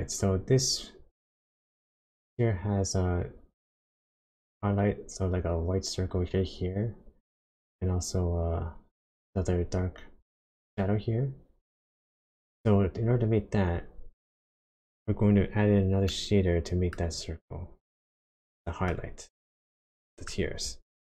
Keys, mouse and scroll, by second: 16.1 middle click, 17.2-17.8 scroll down 3, 18.0 shift+middle click, 19.1-19.5 scroll down 2, 19.7 shift+middle click, 21.0 scroll up 1.